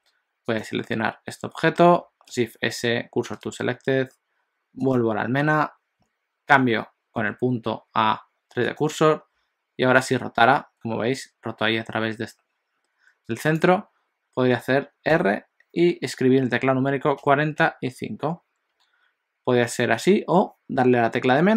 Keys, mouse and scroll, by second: 0.7 click, 2.4 shift+s, 5.0 click.